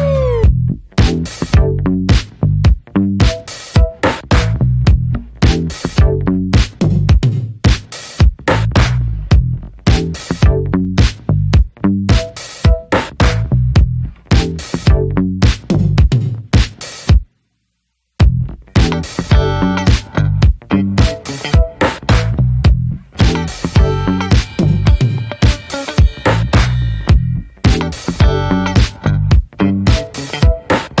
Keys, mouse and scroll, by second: 0.6 scroll down 3, 0.9 shift+click, 1.3 shift+middle click, 1.7-2.5 scroll up 3, 1.8 shift+middle click, 2.2 shift+middle click, 2.5 click, 3.1 middle click, 3.5 click, 3.8 middle click, 4.6 click, 5.6 middle click, 6.0 click, 6.4 middle click, 6.7 click, 7.0 scroll down 1, 7.1 middle click, 7.5 scroll up 1, 7.6 middle click, 7.8 click, 8.1 middle click, 8.4 click, 9.1 middle click, 9.5 click, 9.9 middle click, 10.2 click, 10.6 shift+middle click, 11.0 click, 11.4 middle click, 11.7-12.7 drag, 12.7 middle click, 13.0 click, 13.3 middle click, 13.6 click, 14.5 middle click, 14.8 click, 15.3 scroll down 2, 15.4 middle click, 15.7-17.3 shift+middle drag, 17.3 click, 17.4 scroll down 2, 17.6-17.9 scroll up 2, 17.8 shift+middle click, 17.9 click, 18.1 middle click, 18.5 ctrl+s, 19.0 click, 19.2 scroll down 2, 19.4 shift+middle click, 19.8 click, 19.9 scroll up 2, 20.1-21.1 shift+middle drag, 21.1 click, 21.2 click, 21.5 click, 21.9 click, 22.7 shift+h, 22.9 middle drag, 23.2 ctrl+s, 23.7 ctrl+s, 24.2 click, 24.3 scroll up 1, 24.4-24.9 scroll down 10, 24.9 alt+middle click, 25.0 alt+middle click, 25.3-25.8 scroll up 3, 26.0 shift+middle click, 26.1 scroll up 2, 26.4 shift+middle click, 27.4-28.7 scroll up 2, 29.1 click, 29.3 shift+middle click, 29.4-29.8 scroll up 3, 29.8-31.0 shift+middle drag.